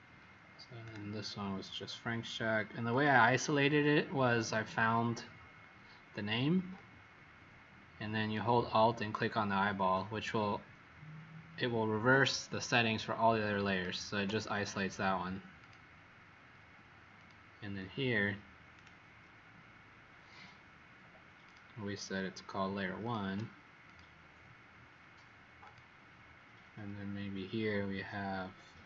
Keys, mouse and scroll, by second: 0.7 right click, 2.8 click, 13.6 alt+click, 15.5 click, 18.7 right click, 21.4 click, 22.9 alt+click, 23.8 click.